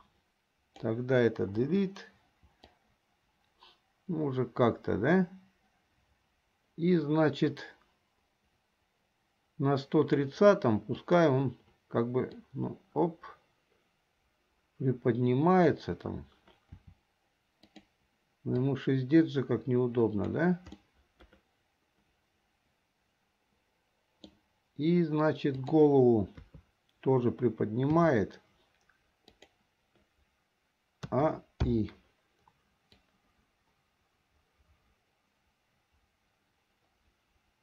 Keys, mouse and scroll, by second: 0.0-0.9 drag, 1.7 Delete, 2.8-10.4 drag, 11.0 click, 12.5 click, 12.8-15.9 drag, 17.0 r, 18.8-20.6 drag, 20.9-24.5 middle drag, 25.6 click, 27.2 KP_3, 28.0 r, 31.2 a, 31.8 i, 33.1-37.6 drag.